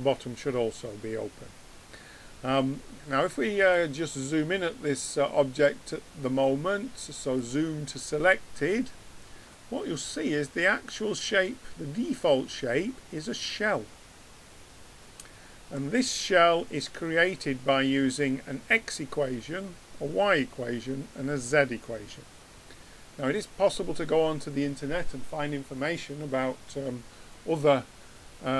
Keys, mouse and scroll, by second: 3.6-6.0 drag.